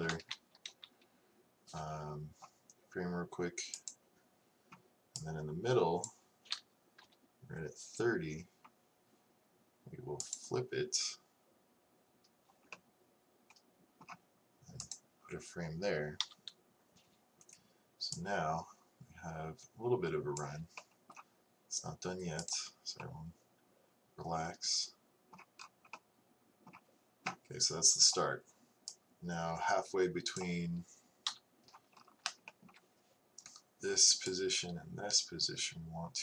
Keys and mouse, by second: 0.4 Left, 0.7 Right, 7.1 Right, 14.8-16.3 drag, 16.3 KP_3, 22.9 click, 28.2-31.1 drag, 31.3 KP_3, 34.5-36.0 drag.